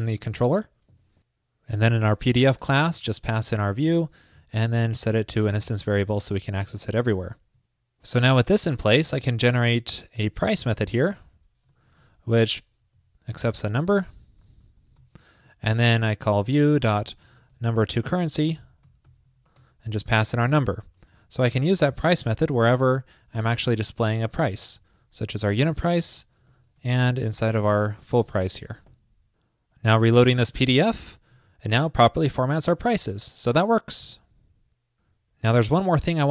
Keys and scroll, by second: 0.4 super+s, 24.5 alt+shift+Right, 24.6 alt+shift+Right, 25.1 alt+shift+Left, 27.2 alt+shift+Left, 27.6 alt+shift+Right, 28.3 super+s, 30.9 super+r.